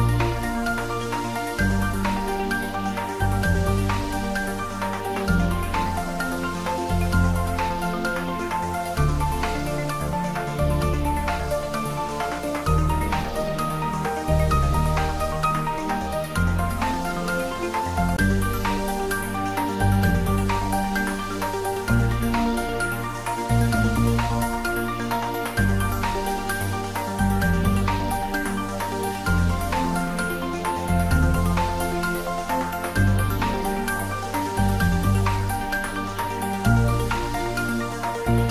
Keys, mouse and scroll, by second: 0.3-5.3 middle drag, 5.3 click, 7.9 click, 8.1 shift+d, 8.4 r, 9.9-10.9 typing, 10.7 click, 12.1 g, 14.8-18.0 drag, 18.0 r, 19.7 click, 20.1 g, 21.2 click, 21.6-22.6 typing, 24.4 z, 25.7 z, 26.9 r, 27.4 click, 28.1 ctrl+z, 30.0-30.9 typing, 32.6 click, 33.1 g, 33.4 x, 36.4 click, 36.8-37.8 typing, 38.2 Left.